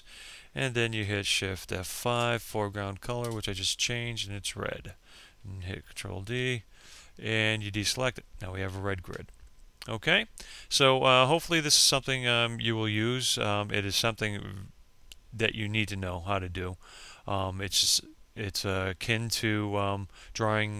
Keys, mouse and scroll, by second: 0.5 Return, 3.1 ctrl+d.